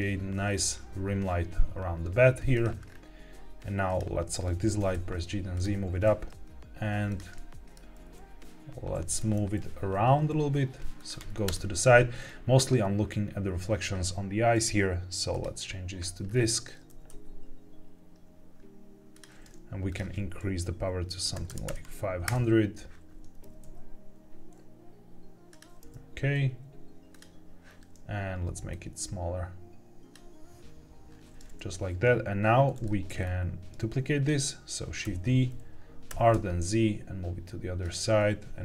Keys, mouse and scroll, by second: 0.4-1.3 scroll down 2, 1.3 r, 2.4 click, 2.8-3.5 scroll down 2, 3.8 click, 4.6 g, 4.8 z, 5.5 click, 5.9 r, 7.0 click, 7.3 middle click, 8.0 r, 9.0 Escape, 9.3 r, 9.5 z, 10.9 click, 11.4 KP_0, 12.0 scroll up 2, 14.4-15.3 drag, 16.2-16.8 scroll down 2, 16.8 scroll down 1, 16.8 r, 17.0 z, 19.0 click, 19.8-22.2 drag, 21.6 KP_0, 23.3 r, 23.5 z, 25.4 click, 25.7 r, 27.0 click, 28.6 click, 32.7 middle drag, 33.1-33.6 scroll down 2, 34.9 shift+d, 36.0 r, 36.2 z, 37.7 click.